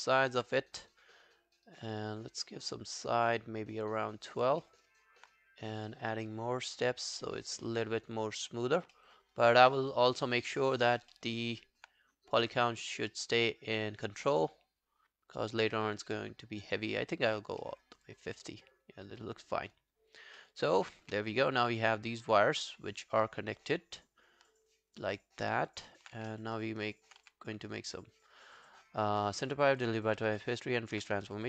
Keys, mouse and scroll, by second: 0.0 alt+click, 4.6 alt+middle click, 4.9 alt+right click, 9.0 alt+middle click, 9.4 alt+right click, 9.7 alt+middle click, 9.9 alt+right click, 10.2 alt+click, 10.9 alt+right click, 11.2 alt+middle click, 11.4 alt+right click, 17.6 alt+middle click, 17.9 alt+right click, 18.1 alt+click, 20.4 alt+middle click, 20.6 alt+right click, 21.0 w, 21.6-22.0 scroll down 3, 21.8 alt+middle click, 22.0 alt+right click, 22.2 alt+click, 25.9 alt+middle click, 26.2 w, 26.4 scroll down 1, 26.6 alt+click, 26.9 alt+right click, 27.3 w, 30.1 w, 30.4 alt+middle click, 30.6 alt+right click, 30.8 alt+click.